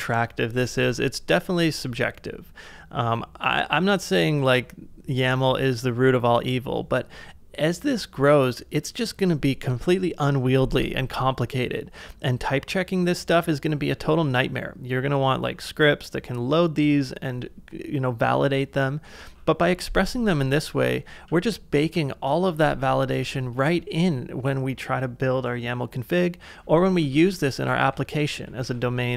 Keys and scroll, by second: 0.8 super+Tab, 19.0 super+Tab, 23.2 shift+5, 26.6-29.1 typing.